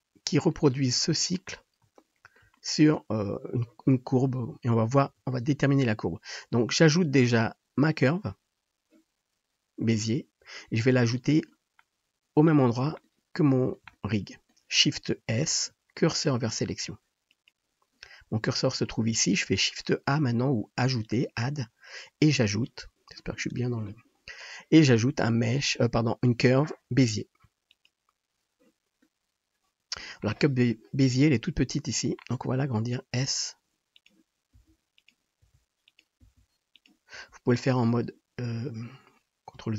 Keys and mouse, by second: 5.0 shift+a, 12.5 click, 13.0-21.0 shift+middle drag, 15.4 shift+s, 21.0-34.2 drag, 31.1 KP_7, 33.2 s, 34.2-39.7 middle drag, 34.6 s, 35.5 g, 36.3 s, 37.2 g.